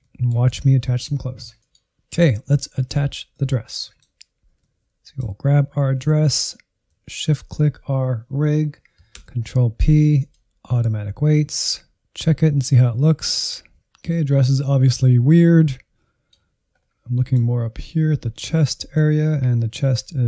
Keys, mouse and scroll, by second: 1.6-3.3 drag, 3.3-6.3 middle drag, 6.3-9.1 shift+drag, 9.1 ctrl+p, 12.8-18.4 drag, 18.4 scroll up 1, 18.6-20.2 middle drag.